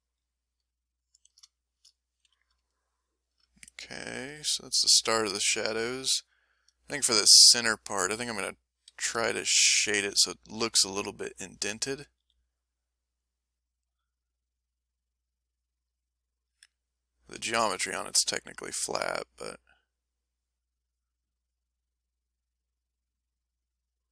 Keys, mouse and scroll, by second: 1.1 a, 1.5 shift+middle click, 2.2 m, 2.7 ctrl+shift+middle click, 3.2 middle click, 4.1-5.7 middle drag, 5.7 click, 6.4 middle click, 6.8 click, 7.2 middle click, 7.7 middle click, 8.1 middle click, 8.9 f, 9.5 middle click, 10.0 f, 11.0 ctrl+shift+click, 12.1 f, 12.7 click, 13.2 click, 13.6-16.2 drag, 16.4 click, 17.5 shift+click, 18.3 shift+click, 18.7 shift+click, 19.3 shift+click, 19.9 shift+click, 20.3 shift+click, 20.9 shift+click, 21.4 shift+click, 21.9 shift+click, 22.4 shift+click, 23.3 shift+click.